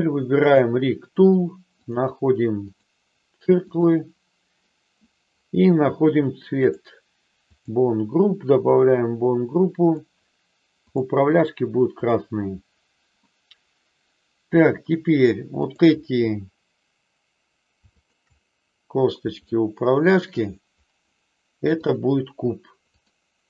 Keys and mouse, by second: 0.4 click, 1.9 click, 6.6 click, 7.4 click, 8.6 click, 9.8-11.0 drag, 12.0 click, 13.2-14.6 middle drag, 15.6-16.9 drag, 19.4 shift+middle click, 21.7-23.2 drag.